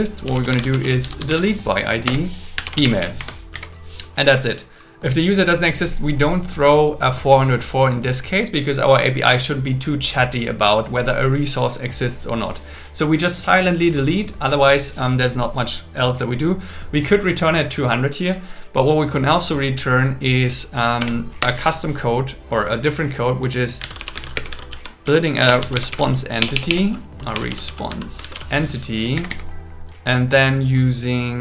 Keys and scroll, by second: 2.1 Return, 3.2 Escape, 3.5 Down, 21.0 Return, 24.3 space, 24.5 shift+r, 25.5 BackSpace, 26.9 BackSpace, 28.3 shift+e, 29.1 Down.